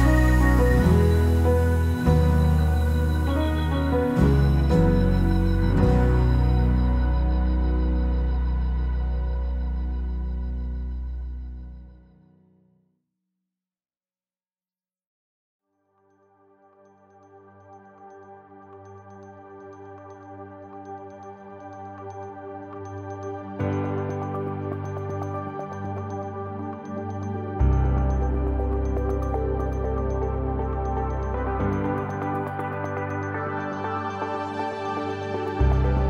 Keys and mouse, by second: 0.0 Tab, 0.3 shift+middle click, 0.7 ctrl+s, 1.4 alt+middle click, 2.0 alt+middle click, 2.3 click, 2.4 Tab, 2.4 Tab, 2.6 alt+middle click, 2.8 shift+middle click, 3.0 alt+middle click, 3.3 alt+middle click, 4.3 alt+middle click, 4.5 shift+middle click, 4.7-6.1 drag, 6.2 click, 6.8 KP_0, 7.6 click, 8.3 click, 8.5-10.6 drag, 11.6 click, 12.6 middle click, 13.4 click, 14.4 click, 14.6 KP_0, 15.0 alt+middle click, 15.5 middle click, 16.8 click, 17.6 click, 18.4-19.7 drag, 21.6-24.0 drag, 24.5-27.2 drag, 27.4-28.5 drag, 28.6-29.6 drag, 30.6 ctrl+s, 31.2 click, 31.9 click, 32.3 click.